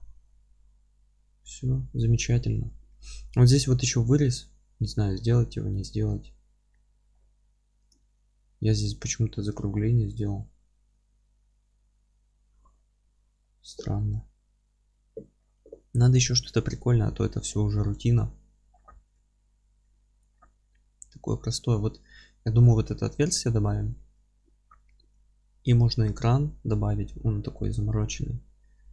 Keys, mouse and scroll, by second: 0.1-0.5 scroll down 2, 0.5-3.4 middle drag, 0.9-2.2 scroll up 2, 3.4 scroll up 2, 5.1-7.9 middle drag, 5.1-6.1 scroll down 2, 6.4-6.7 scroll down 2, 7.0-7.9 scroll up 2, 7.9 click, 8.0 Tab, 8.8-9.3 scroll down 1, 9.3-10.6 middle drag, 9.7 scroll down 1, 10.2 scroll up 1, 13.2-13.6 scroll down 1, 13.6-15.5 middle drag.